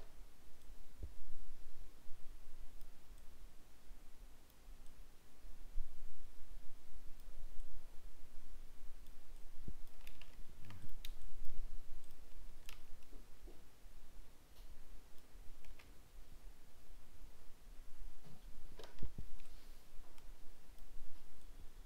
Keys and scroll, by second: 10.3 ctrl+z.